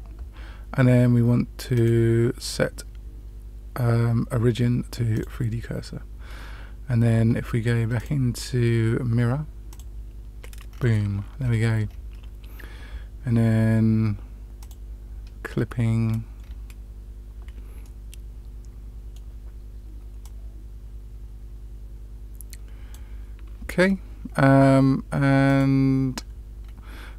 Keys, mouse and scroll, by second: 1.7-5.2 drag, 6.2-6.9 scroll down 2, 7.9-9.7 drag, 10.6 scroll down 2, 11.4 scroll down 1, 14.5 click, 16.3-16.9 scroll up 2, 17.8-19.1 middle drag, 20.1-22.9 drag, 25.4 click, 26.6-27.1 scroll down 1.